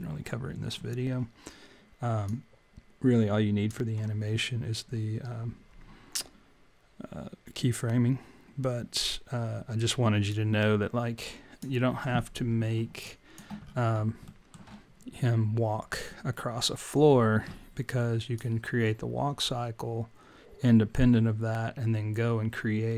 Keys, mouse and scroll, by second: 2.2 click, 10.7 click, 13.1 alt+click, 13.6 scroll up 5, 14.3 alt+middle click.